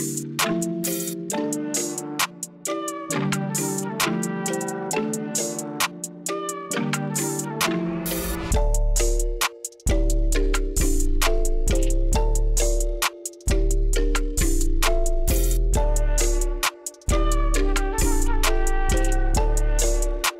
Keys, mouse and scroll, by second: 2.0 shift+middle click, 2.3 shift+middle click, 3.8-7.2 shift+drag, 8.1-8.7 shift+middle drag, 9.7-14.2 shift+drag, 14.6 shift+middle click, 15.5 scroll up 1, 16.5-18.9 shift+drag, 19.3 shift+middle click, 19.6 shift+middle click.